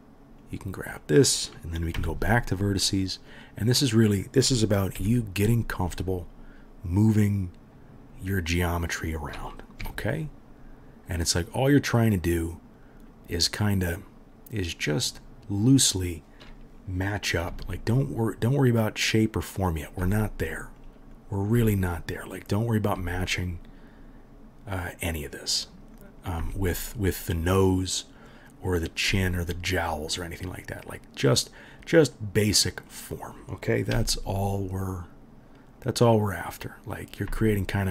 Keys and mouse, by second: 0.4 middle click, 1.0-2.6 right drag, 2.0 1, 2.6 middle click, 2.7 right click, 3.3-8.2 middle drag, 5.0 g, 8.2-8.7 right drag, 8.7-15.1 middle drag, 9.8 g, 15.1-15.8 right drag, 15.8-19.1 middle drag, 17.5 g, 19.1-19.5 right drag, 19.5-20.9 middle drag, 20.0 g, 20.9-22.2 right drag, 21.2-24.5 drag, 21.2-22.2 middle drag, 21.6 g, 22.5-25.7 middle drag, 22.5-24.5 right drag, 23.0 g, 25.7 right click, 26.0-28.1 middle drag, 26.4 g, 27.1 click, 27.1-37.0 right drag, 28.7-29.8 drag, 28.7-29.8 middle drag, 29.1 g, 33.9 g, 37.0 middle click, 37.1-37.9 right drag, 37.3 g.